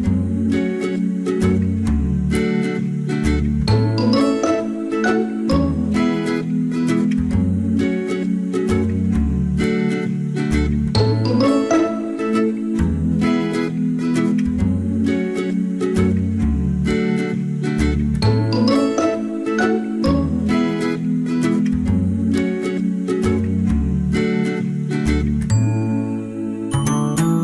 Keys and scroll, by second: 6.3 ctrl+z.